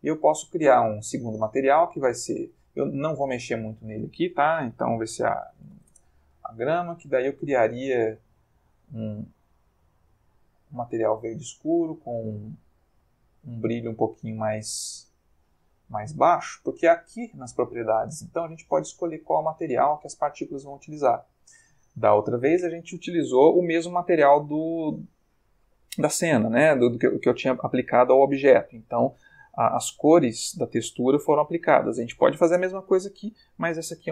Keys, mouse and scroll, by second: 1.0 click, 2.5 click, 3.8 click, 5.3 g, 5.4 r, 5.6 m, 5.7 a, 5.9 Return, 7.1 click, 7.8 click, 9.1-10.9 drag, 13.0 middle click, 14.1-16.0 drag, 17.1 click, 18.6 click, 20.6 click, 32.8-33.6 middle drag.